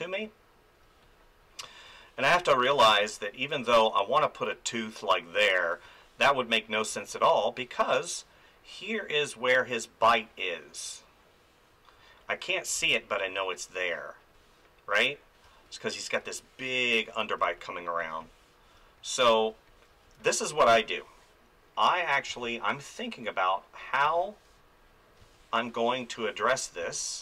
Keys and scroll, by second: 2.3 space, 5.8 ctrl+z, 6.2 space, 12.7 space, 14.9 ctrl+z, 15.4 space, 16.9 ctrl+z, 17.4 space, 22.3 space, 24.0 space, 26.5 ctrl+z, 26.8 space.